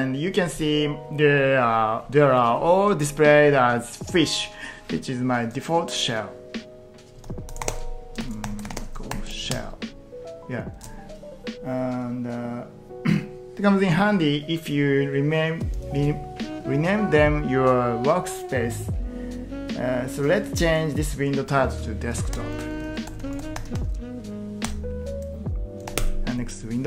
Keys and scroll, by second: 7.0-9.3 typing, 22.2 ctrl+t, 22.8-24.4 typing, 24.7 Return, 25.7-26.4 typing.